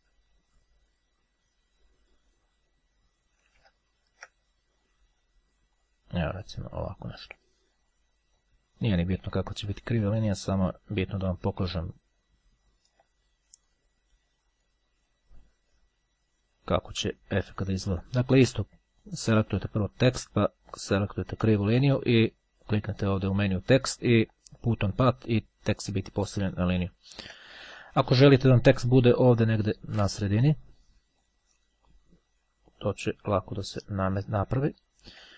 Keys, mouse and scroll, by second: 2.9-3.5 scroll down 2, 3.5-4.5 shift+scroll down 3, 5.9 click, 6.9 right click, 8.3 click, 11.0 click, 12.1-13.5 ctrl+drag, 13.7-15.3 drag, 16.7-17.7 drag, 18.1 shift+click, 19.3 click, 20.3 shift+click, 20.9 shift+click, 23.2 click, 24.8 click, 26.3-26.9 ctrl+scroll up 2, 27.1-27.7 ctrl+scroll down 2, 31.3 click, 32.8 click, 33.9-34.5 scroll down 2, 34.8-35.3 shift+scroll down 2.